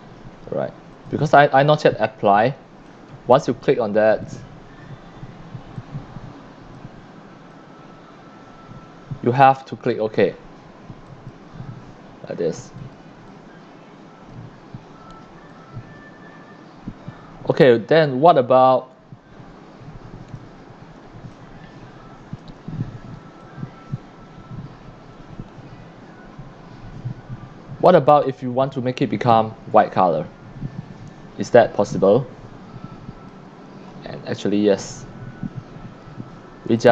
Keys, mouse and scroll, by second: 1.0 click, 2.9-3.5 drag, 4.2 click, 5.7-6.8 drag, 7.5-9.5 drag, 11.0 click, 12.8 click, 12.8 c, 13.2 c, 13.3-14.3 drag, 15.5-20.3 drag, 21.0 c, 21.3-22.4 drag, 23.4-33.3 drag, 36.7 x, 36.8-36.9 drag.